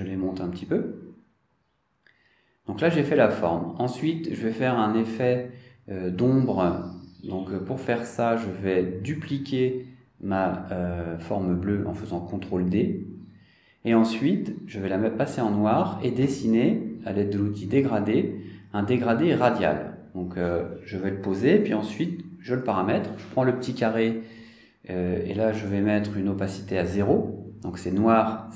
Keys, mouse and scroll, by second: 6.0-7.4 scroll down 3, 11.7 middle click, 14.0 ctrl+d, 16.7 click, 18.9 click, 21.6 click, 23.2 click, 24.9 click, 27.7 click.